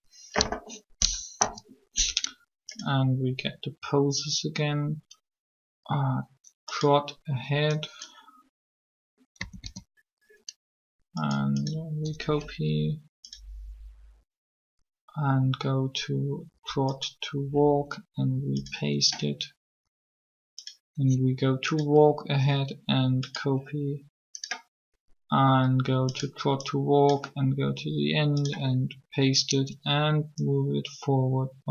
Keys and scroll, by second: 1.4 3, 9.4 a, 9.4 a.